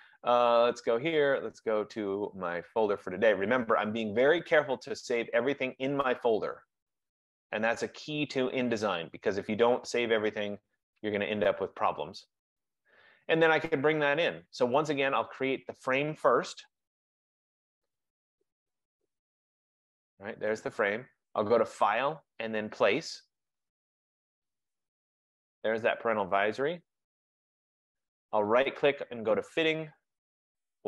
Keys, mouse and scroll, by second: 0.7 click, 3.6 click, 3.9 click, 5.3 click, 5.5 click, 7.1 click, 7.4 click, 9.1 click, 11.0 click, 17.1 F15, 19.9 click, 21.8 click, 28.6 right click.